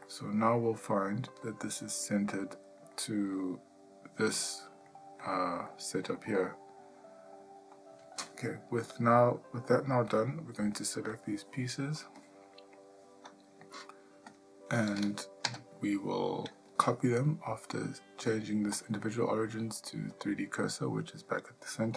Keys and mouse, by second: 0.0-1.2 middle drag, 1.4 ctrl+middle click, 2.1 middle click, 3.0 ctrl+middle click, 4.3 middle click, 4.9 ctrl+middle click, 5.8 shift+middle click, 6.2-7.7 middle drag, 9.8 ctrl+middle click, 11.1 click, 14.3 click, 15.4 KP_7, 18.9-20.2 drag.